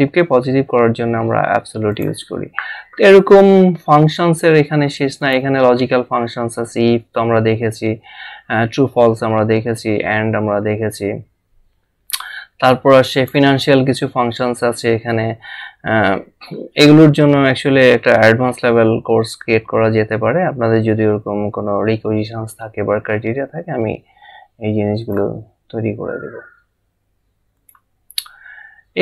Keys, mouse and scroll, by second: 1.9 click, 5.2 click, 13.1 click, 15.8 scroll down 1, 20.8 scroll up 1, 25.4 click, 27.6 click.